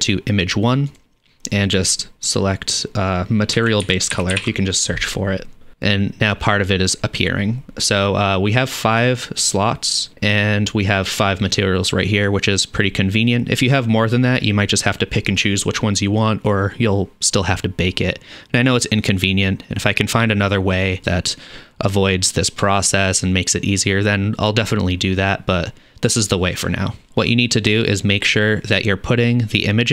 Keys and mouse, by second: 1.0-10.1 drag.